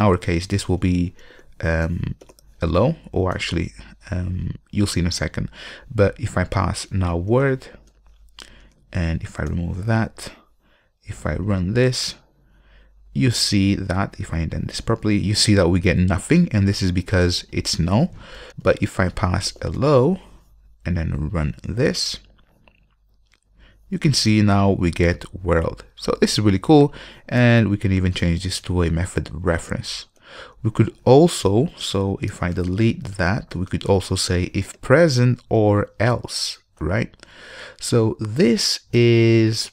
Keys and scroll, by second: 3.5 Return, 8.1 Return, 9.6 super+y, 11.6 super+y, 14.2 alt+super+l, 21.8 ctrl+F5, 27.5 alt+Return, 32.5 alt+BackSpace, 38.8 ctrl+space, 39.1 Return.